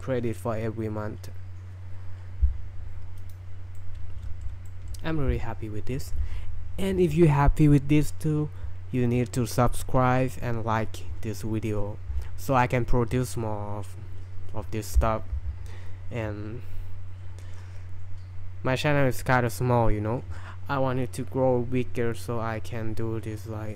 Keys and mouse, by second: 3.2 click, 3.8-4.5 middle drag, 4.7 shift+middle drag.